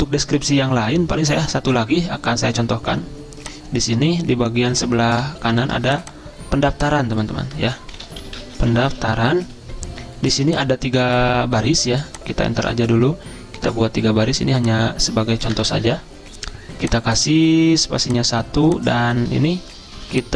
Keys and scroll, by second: 8.1-9.0 typing, 12.7 Return, 12.7 typing, 15.7 Return, 16.0 ctrl+a.